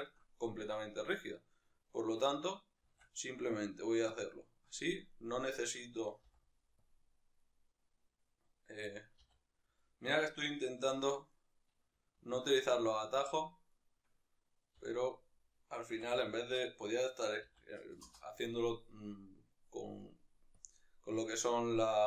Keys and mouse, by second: 1.2 right click, 2.8 shift+d, 4.2 click, 5.2-6.9 right drag, 6.9 ., 7.4 right click, 9.2 r, 10.3 right click, 11.3 right click, 13.1 shift+s, 13.7-14.7 right drag, 14.7 r, 20.7-22.0 drag.